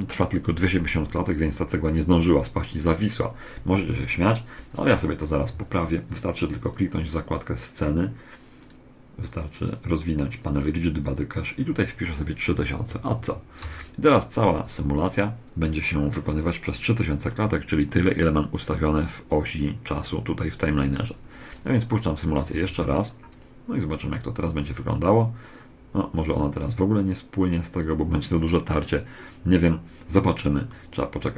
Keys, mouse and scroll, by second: 5.1 Escape, 6.4 click, 8.4 click, 11.2 click, 12.8 0, 22.2 alt+a, 30.4-31.3 middle drag.